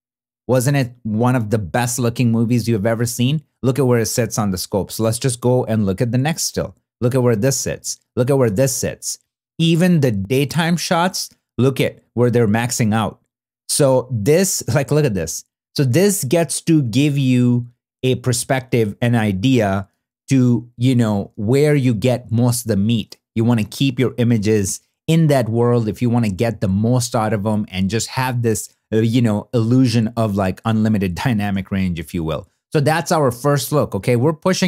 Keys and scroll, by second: 20.1 super+w, 22.9 super+w, 25.8 super+w, 31.1 super+w.